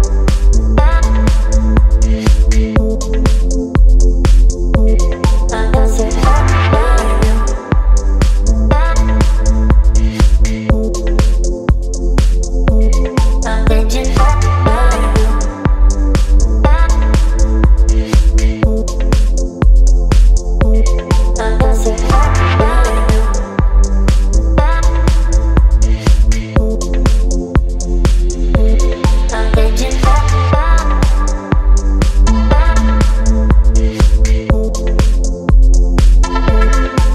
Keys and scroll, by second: 22.3 Return.